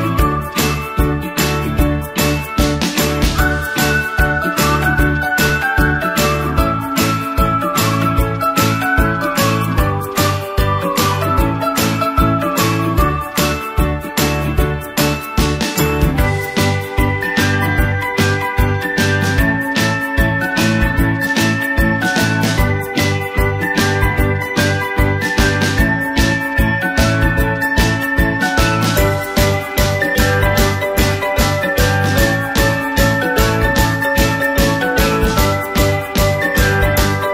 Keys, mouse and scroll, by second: 6.5-6.9 typing, 7.1 click, 31.3-32.1 typing, 32.5 click, 35.9-36.7 typing, 36.8 click.